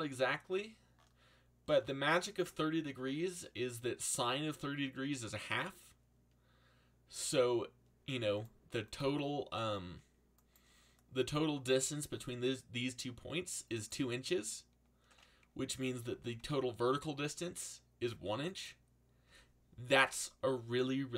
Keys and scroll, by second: 12.1 g, 16.1 g, 16.3 z.